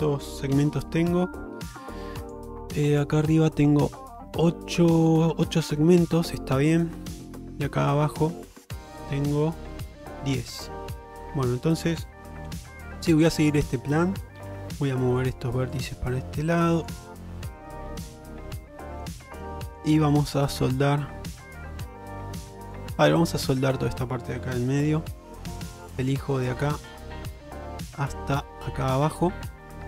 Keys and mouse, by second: 0.6 2, 2.3 click, 6.6 middle click, 7.1 shift+middle click, 8.6 alt+click, 10.6 middle click, 12.5 1, 13.5 click, 14.4 g, 15.8 click, 16.1 g, 17.9 g, 18.9 middle click, 20.0 g, 22.0 g, 23.4 middle click, 25.0 2, 28.3 shift+middle click, 29.7 shift+middle click.